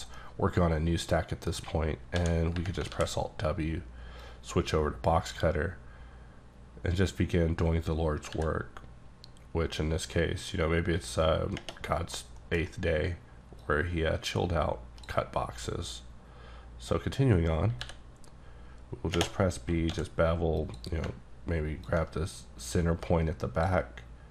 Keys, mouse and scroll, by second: 0.2 middle click, 1.6 scroll up 1, 2.2 d, 2.9 alt+w, 4.2 click, 8.3 b, 12.2 middle click, 12.7 scroll up 2, 13.7 click, 17.9 b, 19.9 d, 20.6 click.